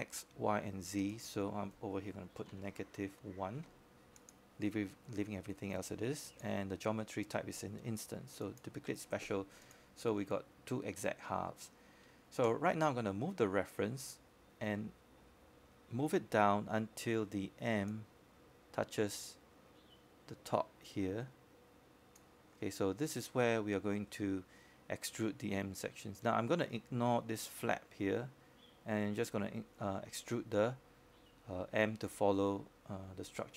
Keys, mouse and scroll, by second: 9.8 -, 10.8 1, 11.4 click, 20.3-21.4 scroll down 1, 21.4 click, 22.2-23.1 scroll up 1, 23.1-23.5 scroll down 1, 23.5-23.8 scroll up 1, 23.8 w, 25.4-30.1 drag, 30.1-30.6 scroll up 1, 30.6-31.1 scroll down 1, 31.1-33.5 scroll up 1.